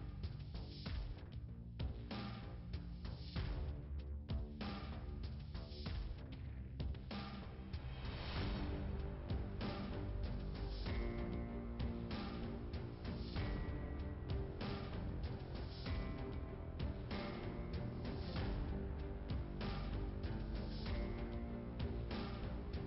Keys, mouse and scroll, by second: 0.3 scroll up 2, 1.9 click, 4.3-4.9 scroll up 2, 10.7 click, 12.6 click, 13.9 click, 14.0 click, 16.9 click, 18.2 middle click, 19.7 scroll up 1, 21.2 scroll down 1.